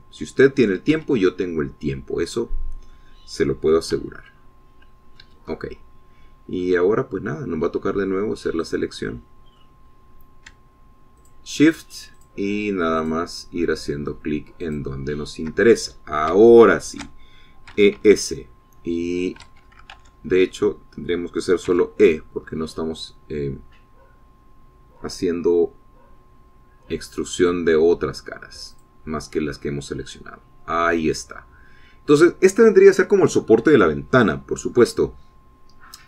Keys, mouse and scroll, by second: 2.4 middle click, 2.4 Escape, 2.7-4.6 drag, 4.6 middle click, 5.5 c, 5.8-6.9 drag, 6.7 Escape, 7.1-8.3 drag, 8.3-10.1 middle drag, 10.1 click, 10.4 middle click, 10.6 click, 11.3 middle click, 11.4-11.8 scroll up 4, 12.7 shift+click, 13.7 shift+click, 14.5 shift+click, 16.2 shift+click, 17.6 scroll down 1, 18.0 shift+click, 19.2 e, 19.5 s, 20.9 Escape, 21.4 ctrl+z, 22.3 click, 23.2 e, 30.3 click, 31.0-33.8 middle drag.